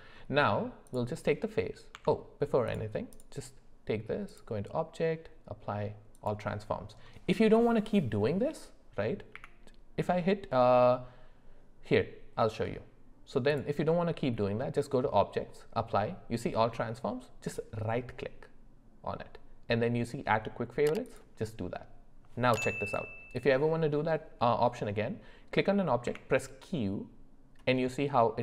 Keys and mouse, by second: 0.9 click, 1.9 Tab, 4.4-6.3 drag, 9.3 q, 13.6-22.2 drag, 22.9-26.1 drag, 26.1 q.